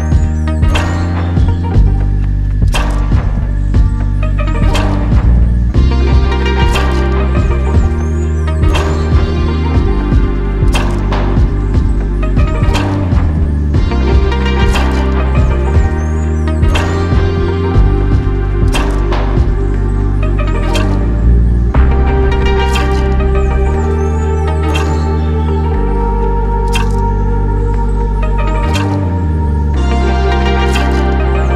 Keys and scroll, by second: 15.3 j, 17.6 Escape, 20.6 Escape.